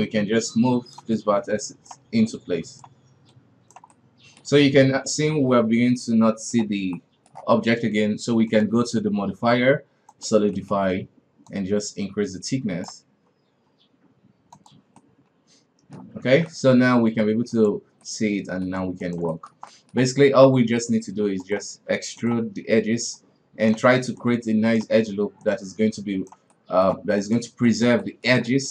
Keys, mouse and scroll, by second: 1.4 right click, 2.3 right click, 3.3 right click, 3.9-4.5 middle drag, 4.5 scroll up 1, 4.8-8.5 middle drag, 8.5-10.5 drag, 10.5 middle click, 11.5-14.5 drag, 15.0-16.3 middle drag, 16.3 alt+a, 16.5-17.5 middle drag, 17.5 right click, 18.0-19.0 middle drag, 19.0 shift+right click, 19.3-20.3 middle drag, 20.3-20.6 scroll down 1, 20.6 e, 21.7 r, 23.1-23.7 right drag, 24.2 right click, 25.4 right click, 26.5-27.2 middle drag, 27.2 right drag, 27.6 shift+right drag, 28.0-28.7 shift+middle drag.